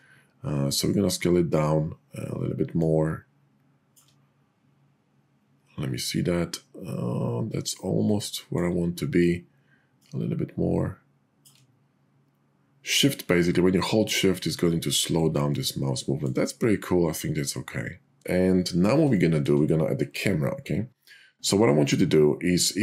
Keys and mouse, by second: 7.7 middle click, 17.5 middle click.